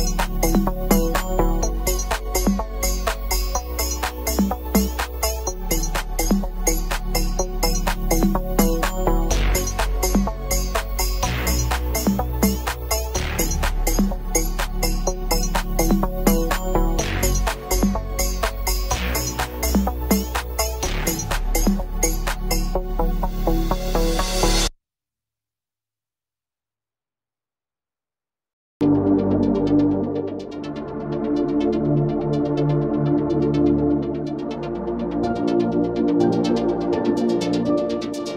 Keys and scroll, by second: 2.0 KP_Add, 18.3 shift+F2, 24.3 ctrl+z.